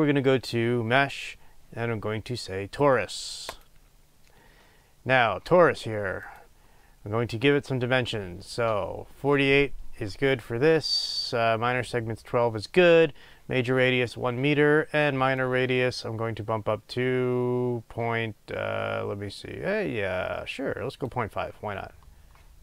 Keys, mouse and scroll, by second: 4.5 scroll up 1, 6.2 click, 15.4-22.6 drag.